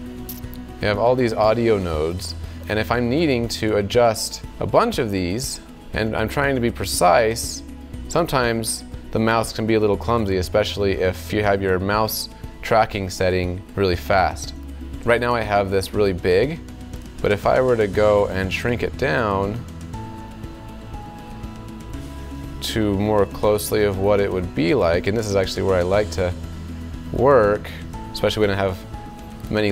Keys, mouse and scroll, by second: 0.7-1.9 drag, 4.0 alt+click.